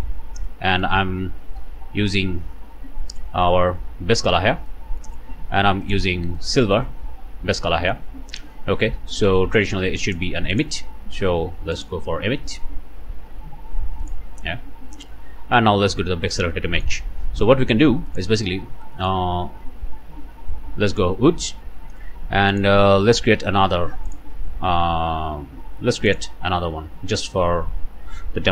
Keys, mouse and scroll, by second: 0.4-1.0 scroll up 1, 1.0 scroll down 1, 2.8 scroll up 1, 3.2 middle click, 3.7-4.7 scroll up 2, 5.9 click, 6.4 click, 7.8 click, 8.1-8.7 scroll down 2, 9.4 click, 10.1 click, 10.5 click, 11.7 click, 14.0 click, 14.5-15.0 scroll down 1, 16.5 middle click, 18.1 middle click, 18.8 middle click, 19.5 alt+a, 20.9 click, 22.5 click, 23.2 click, 24.1 click, 24.7 scroll down 2, 26.1 click, 27.2 click.